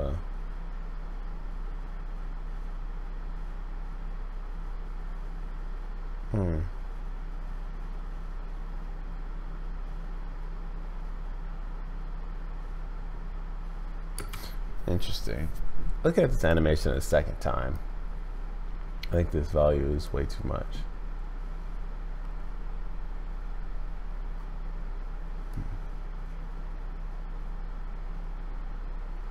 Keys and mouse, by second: 14.1 space.